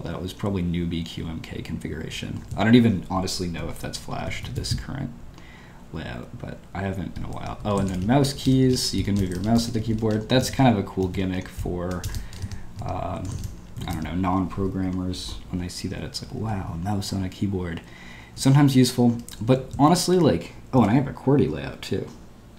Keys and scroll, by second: 1.2-2.0 typing, 7.4 Escape, 12.8 Escape, 16.2-17.2 typing, 19.3-19.7 typing, 20.7 typing.